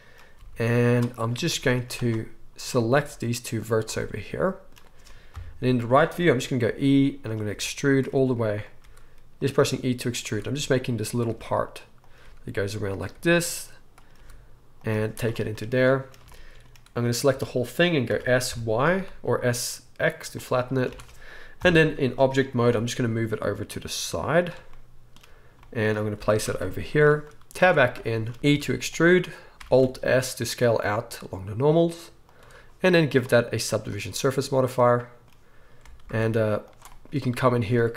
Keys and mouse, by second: 0.3 g, 2.1 click, 2.7-33.1 middle drag, 3.0 g, 5.3 KP_3, 6.6-10.2 typing, 11.3 e, 12.2 e, 13.1 e, 14.1 e, 14.9 z, 17.3 a, 18.1 s, 20.9 Tab, 21.6 KP_1, 22.6 g, 26.2 g, 27.6 Tab, 28.5 e, 29.6 alt+s, 33.1-37.9 drag, 36.0 alt+s.